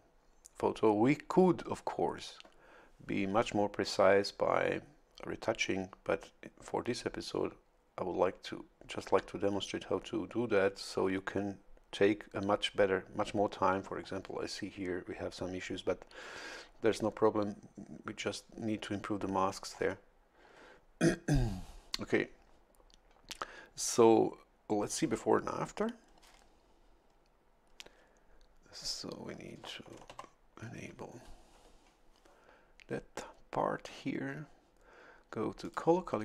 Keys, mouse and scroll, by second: 13.8-14.7 scroll up 1, 19.5-20.0 scroll down 2, 20.4 scroll down 2, 30.1 ctrl+shift+l, 35.6 click.